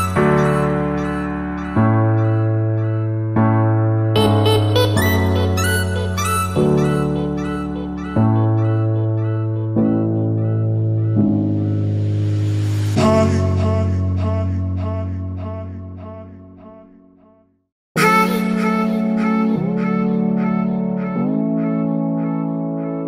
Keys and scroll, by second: 9.4 ctrl+z, 22.5 Escape.